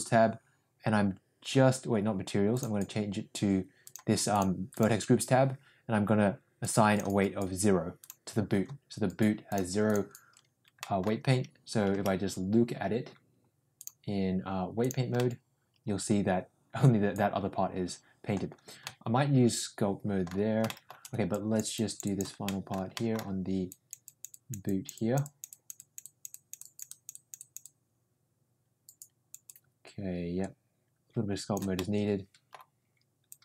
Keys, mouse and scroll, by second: 2.5 click, 3.8 drag, 6.7 click, 8.0 click, 9.4 click, 10.7 middle click, 11.3 Tab, 11.9 Tab, 13.8-14.9 drag, 15.2-18.3 middle drag, 18.8-20.2 middle drag, 20.6 shift+middle click, 21.2 click, 21.7 click, 22.4 middle click, 22.9 middle click, 23.6 click, 24.0 click, 24.6 click, 25.4 click, 25.7 click, 29.4-31.5 drag, 31.7 middle click, 33.2-33.4 drag.